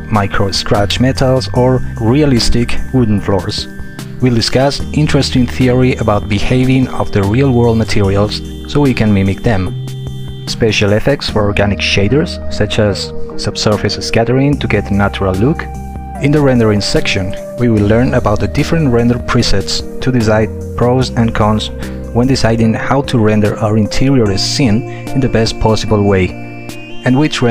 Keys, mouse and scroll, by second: 1.5 Return, 10.0 Return.